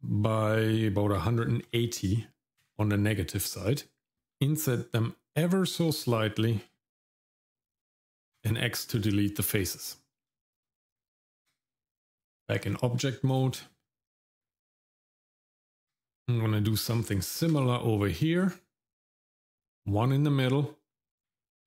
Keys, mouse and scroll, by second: 4.1 shift+middle click, 4.1 i, 7.2 x, 9.1 shift+middle click, 9.7 middle click, 10.3 shift+middle click, 10.9 Tab, 12.7 shift+middle click, 13.3 click, 13.7 middle click, 14.4 Tab, 17.4 ctrl+r.